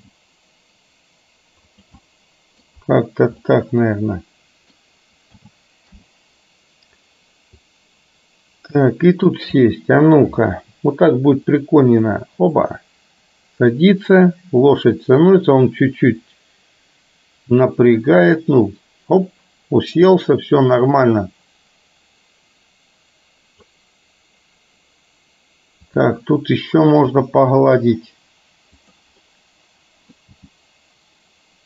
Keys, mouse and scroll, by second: 0.0 g, 2.0-2.8 middle drag, 3.6-4.9 middle drag, 5.4 a, 6.1 i, 7.8-9.5 drag, 9.8-10.1 middle drag, 11.5-23.8 drag, 27.7 g, 29.4 middle click, 30.4 g.